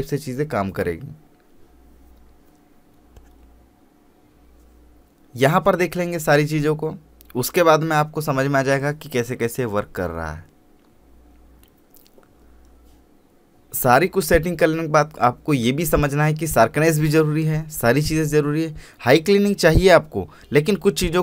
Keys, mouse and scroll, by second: 1.0-12.2 drag, 14.2 Left, 16.0 click, 19.0 scroll up 1, 19.8 scroll down 1.